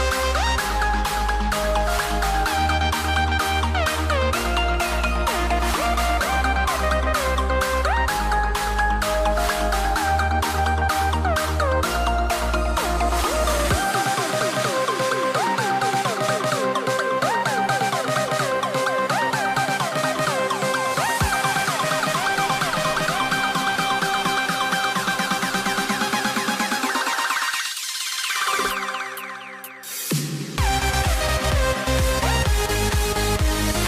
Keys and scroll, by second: 4.4 super+c, 5.8 super+f, 6.2 BackSpace, 7.0 super+f, 10.4 v, 10.9 shift+super+[, 15.3 BackSpace, 15.4 v.